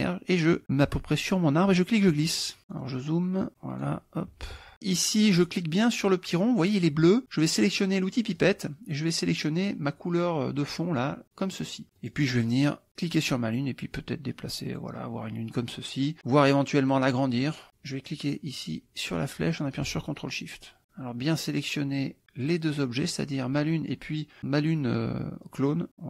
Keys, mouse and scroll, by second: 1.7-3.2 drag, 3.5 ctrl+click, 4.5 ctrl+click, 5.5 click, 8.4 click, 11.2 click, 12.0 click, 12.9 click, 13.8-15.0 drag, 17.1 click, 17.6 click, 19.2-20.8 drag, 21.2 click, 21.6-22.7 drag, 25.5 click.